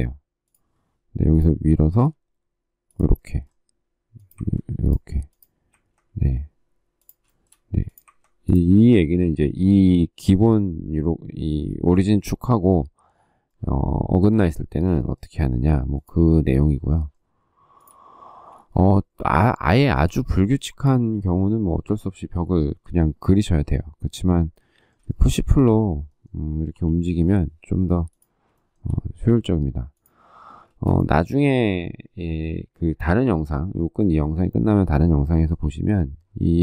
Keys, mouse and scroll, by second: 7.0 shift+middle click, 7.2 shift+double middle click, 11.3 space, 15.3 p, 16.7 shift+middle click, 17.6 shift+click, 18.0 space, 19.7 shift+middle click, 24.9 shift+middle click, 26.5 p, 28.3 shift+middle click, 30.4 space, 36.3 shift+middle click.